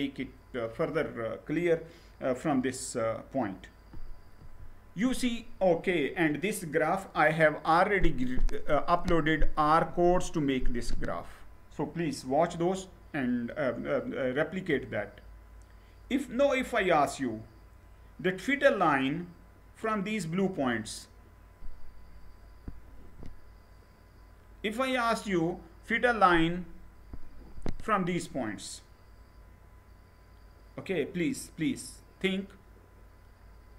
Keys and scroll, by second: 4.0 Right.